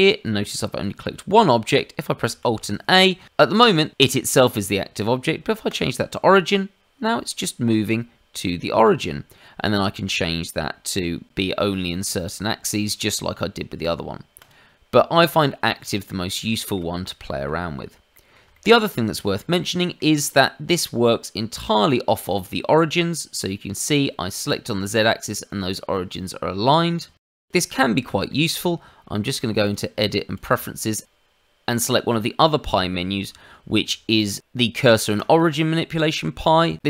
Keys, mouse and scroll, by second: 2.4 alt+a, 5.6 click, 14.3 click, 15.1 click, 15.7 middle click, 16.4 shift+middle click, 17.0 middle click, 18.1 middle click, 18.5 shift+middle click, 18.9-19.2 scroll up 1, 19.3 shift+middle click, 19.7 middle click, 20.2 click, 21.6 click, 22.2 shift+click, 27.1 middle click, 27.5 shift+middle click, 27.8 middle click, 29.6 click.